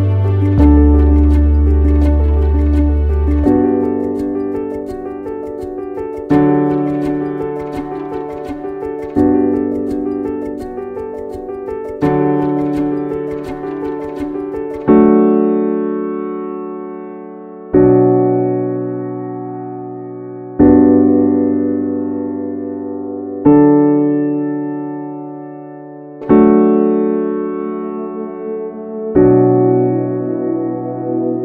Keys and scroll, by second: 21.6 ctrl+z.